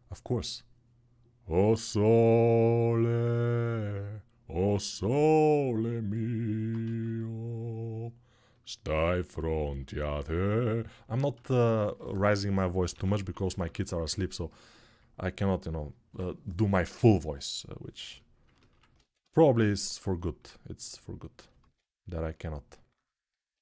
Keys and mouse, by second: 6.6 ctrl+z, 12.7 g, 13.1 ], 13.3 ], 18.7 x, 21.4 alt+q.